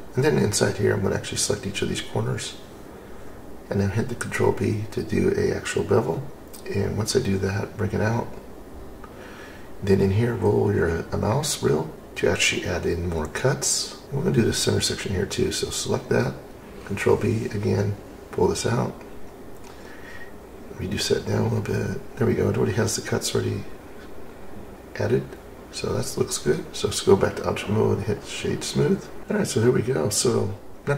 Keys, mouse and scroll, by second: 0.5 click, 1.8 click, 2.9 click, 4.5 middle click, 5.2 scroll up 1, 7.3 shift+click, 9.4 ctrl+b, 11.9-13.2 scroll up 11, 14.0 click, 14.0-15.0 scroll up 1, 15.1 alt+click, 17.0 ctrl+b, 22.8 click, 25.3-26.2 drag, 26.4 click, 27.2 right click.